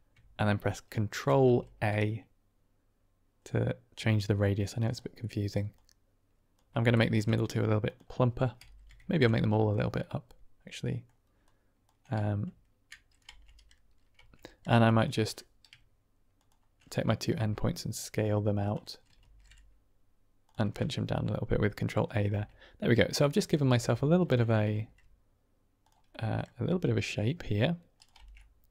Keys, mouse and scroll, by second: 1.2 ctrl+a, 4.7 click, 5.1 middle click, 5.7 click, 6.9 ctrl+a, 7.7 click, 8.5 a, 9.6 click, 9.9-10.9 middle drag, 11.5 click, 13.2 Tab, 14.1 Tab, 14.7 click, 15.2 click, 17.3 s, 18.5 click, 19.1 ctrl+a, 20.3 click, 20.7-22.1 middle drag, 22.2 Tab, 23.1 middle drag, 23.7 Tab, 24.0 click, 24.7 ctrl+a, 25.7 click, 26.0 middle click, 26.6 s, 27.9 click, 28.1 Tab, 28.3-28.7 middle drag.